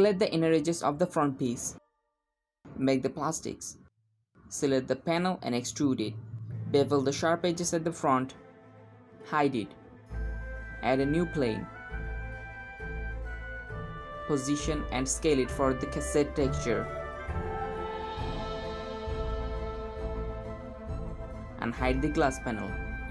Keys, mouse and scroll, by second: 0.7 Left, 1.5 e, 2.4 g, 3.4 shift+click, 3.4 middle click, 4.2 e, 5.5 Tab, 5.5 click, 6.3 shift+click, 6.9-7.4 scroll up 1, 7.4 ctrl+b, 9.2 click, 9.6 h, 10.5 middle click, 10.9 shift+a, 11.7-12.6 scroll down 1, 13.1 g, 13.6-14.0 middle drag, 14.0 scroll down 1, 14.1 g, 15.6 middle click, 15.8 scroll down 1, 16.0-16.4 middle drag, 16.4 s, 17.5 g, 18.0 s, 19.2 g, 19.7 s, 21.7 middle click, 21.7 click.